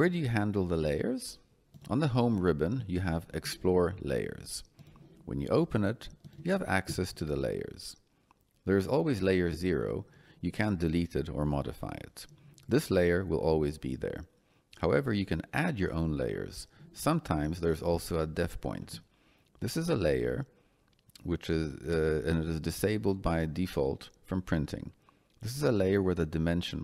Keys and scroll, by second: 2.1 Escape.